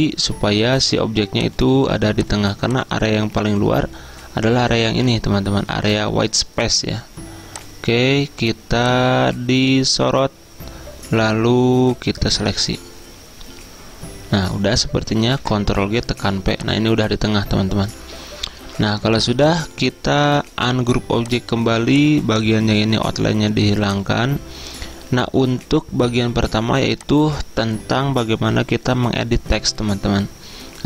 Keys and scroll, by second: 15.4 ctrl+g, 15.9 p.